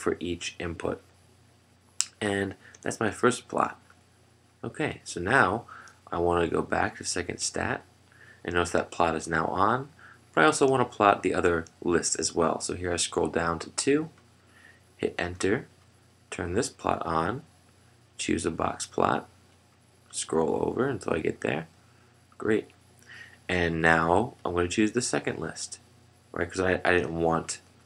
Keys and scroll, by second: 3.9 Return, 3.9 Down, 8.1 F1, 10.0 Down, 14.2 Return, 16.0 Return, 19.0 Return.